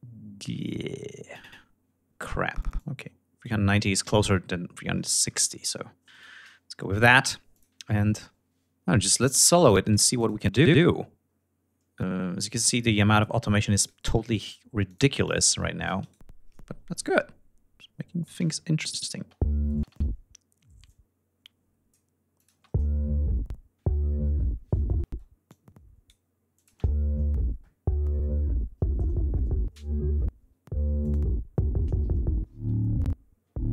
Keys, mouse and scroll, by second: 1.8 ctrl+click, 2.7-3.1 ctrl+scroll down 2, 5.1 shift+right click, 5.7 ctrl+shift+scroll up 3, 6.5 ctrl+click, 6.8 ctrl+scroll up 2, 8.2 scroll up 2, 9.2 click, 9.5 scroll down 2, 13.6 click, 14.0 click, 14.6 click, 15.0 click, 15.8 right click, 16.7-18.2 drag, 18.6 click, 18.9 space, 19.5 space, 20.5-21.7 drag, 22.0 click, 22.1 space, 23.8 ctrl+scroll down 2, 24.2 ctrl+scroll up 2, 24.6 ctrl+space, 25.1 ctrl+click, 26.0 click, 26.2 space, 30.5 click, 32.1 ctrl+scroll down 2, 32.4 ctrl+scroll up 2.